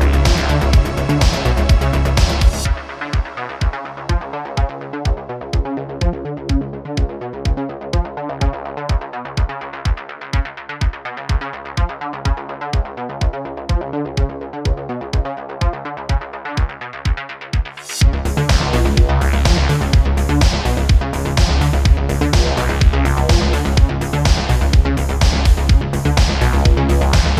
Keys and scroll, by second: 10.1 ,, 14.3 ., 25.3 shift+d, 25.5 x, 25.5 x, 26.6 9, 26.7 0, 26.8 Return, 27.2 s.